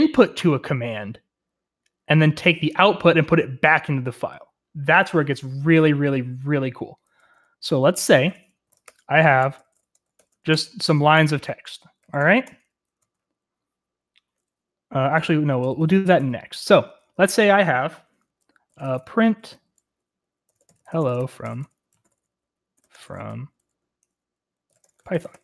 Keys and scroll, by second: 6.9-13.4 typing, 14.8-25.4 typing.